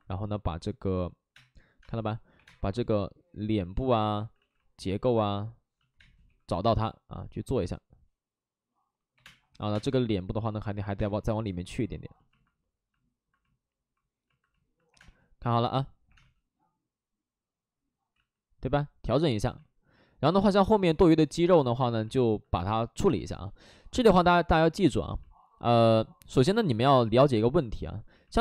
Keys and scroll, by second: 1.3 space, 1.8 space, 2.3 1, 2.4 space, 4.2 ctrl+z, 5.9 space, 6.2 2, 6.7 5, 9.2 space, 9.4 3, 9.7 space, 10.8 ctrl+z, 10.9 space, 14.8 3, 14.9 space, 16.0 3, 16.1 space, 18.1 ctrl+z, 19.4 2, 20.6 space, 24.1 space, 25.2 space.